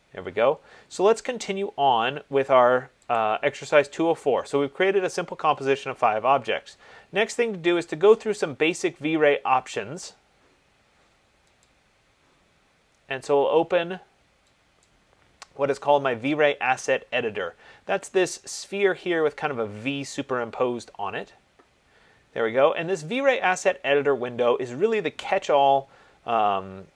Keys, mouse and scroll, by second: 3.5 click, 11.9 click, 15.1 click.